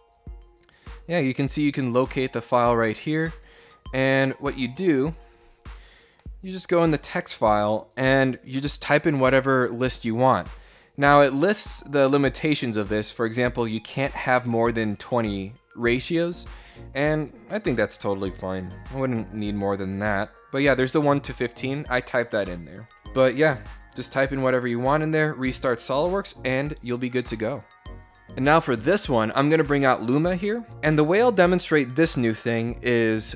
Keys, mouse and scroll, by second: 3.4 click, 4.4 click, 6.9 middle click, 11.3-12.7 drag, 12.8 click, 14.5-15.5 drag, 17.6 click, 18.1-18.4 scroll down 1, 20.5-22.1 drag, 22.3 click, 24.0 click.